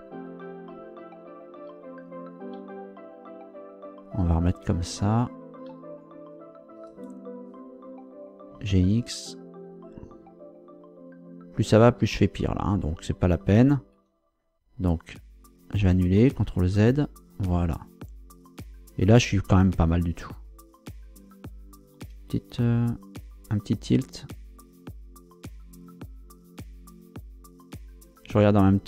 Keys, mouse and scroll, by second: 0.7 Down, 1.7 Left, 5.3 Right, 6.9 Return, 8.5 g, 8.8 x, 13.9 Escape, 14.8 scroll down 2, 15.5 scroll down 2, 16.4 ctrl+z, 19.0 scroll up 2, 22.0 r.